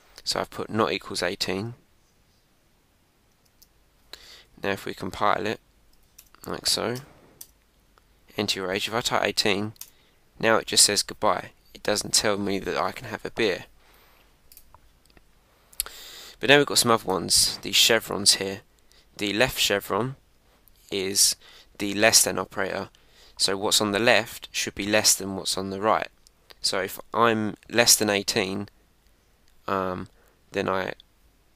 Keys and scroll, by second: 1.5 super+Tab, 3.4 super+Tab, 4.5 Up, 5.3 Up, 5.9 Down, 6.2 Return, 6.7 Up, 7.4 Return.